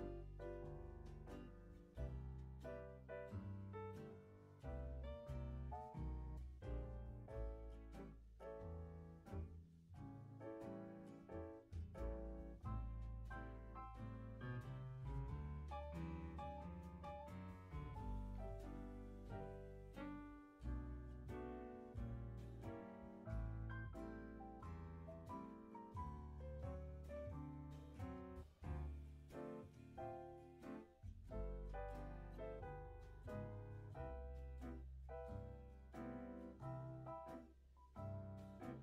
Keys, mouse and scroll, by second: 0.5 space, 1.4 space, 2.2-3.6 drag, 3.8-4.1 scroll down 1, 4.1-4.4 scroll up 1, 4.4 g, 6.3 click, 6.8 click, 7.8-10.8 drag, 12.3-13.5 scroll down 2, 13.5-14.2 drag, 14.2 space, 14.8 space, 15.5-17.3 drag, 18.4 ctrl+z, 18.6 click, 19.1 click, 20.4 click, 21.6 click, 22.7-25.7 drag, 25.8 space, 26.7 space, 27.3 ctrl+z, 27.6 ctrl+z, 27.9 ctrl+z, 28.2 ctrl+z, 28.5 ctrl+z, 29.1-30.3 drag, 31.4 Delete, 32.2-33.3 drag, 33.3 space, 34.1 space, 34.7-36.0 drag, 36.0 space, 36.8 space, 37.3-38.1 drag, 38.1-38.8 scroll up 4.